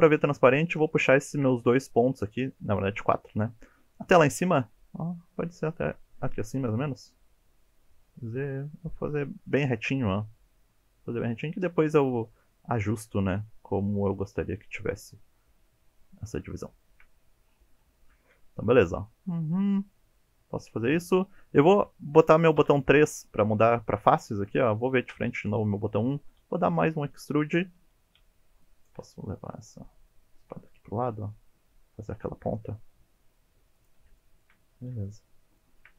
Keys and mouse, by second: 0.8 shift+click, 3.8 g, 8.1 z, 9.5 click, 12.6 shift+click, 13.9-16.2 shift+drag, 16.5 shift+middle click, 16.9 shift+middle click, 20.0 middle click, 22.6 3, 25.1 KP_1, 26.4 e, 27.4 click, 28.2 1, 28.6 drag, 29.0 g, 33.8 click, 34.2 shift+middle drag, 35.0 shift+middle click, 35.7 shift+middle click.